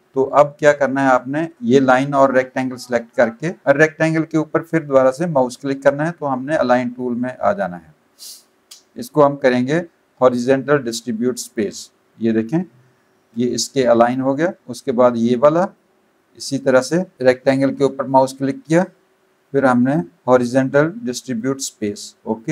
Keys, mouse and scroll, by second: 0.6 click, 1.5 click, 1.7 click, 4.6 click, 7.0 click, 11.4 click, 14.2 click, 14.9 click, 17.1 click, 21.4 click, 22.3 click.